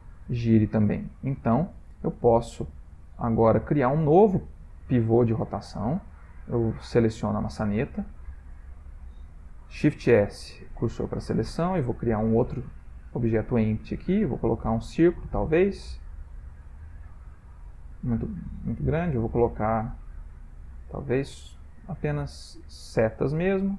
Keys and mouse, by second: 1.7 ctrl+middle click, 2.3 shift+middle click, 2.5 shift+middle click, 2.6 ctrl+middle click, 2.8 middle click, 3.6-6.0 shift+middle click, 5.5 middle click, 5.6 middle click, 5.7 middle click, 6.1 shift+middle click, 6.5 ctrl+middle click, 6.6 ctrl+middle click, 7.1 click, 8.2 ctrl+middle click, 9.8 shift+s, 11.5 ctrl+middle click, 12.2 shift+a, 15.7 middle click, 17.0 ctrl+middle click, 19.7 shift+a.